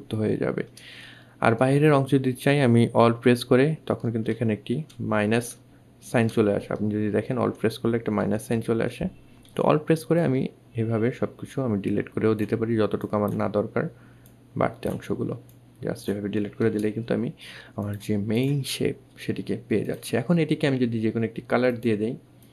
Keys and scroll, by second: 3.6 alt+2, 4.9 alt+2, 7.5 alt+2.